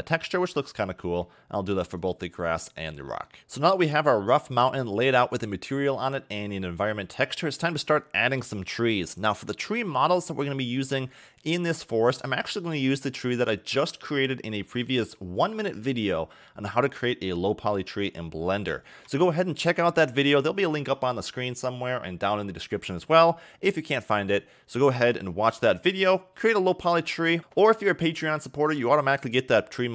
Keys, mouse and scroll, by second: 0.3 scroll down 1, 0.8 scroll down 2, 1.1 middle click, 1.4-2.0 scroll up 3, 2.0 click, 3.1 middle click, 9.4 scroll down 1, 10.2-11.6 middle drag, 11.6-14.9 scroll down 5, 20.5-21.3 shift+scroll down 1.